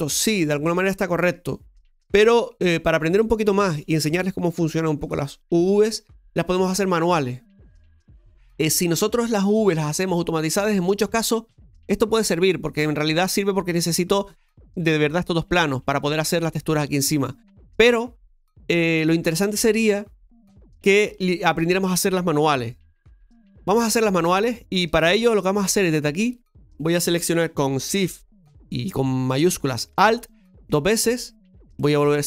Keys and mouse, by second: 10.2-23.3 middle drag, 23.3 Tab, 24.8 shift+middle click, 26.2 right click, 30.2 alt+shift+right click, 30.4 alt+shift+right click, 31.8 middle click.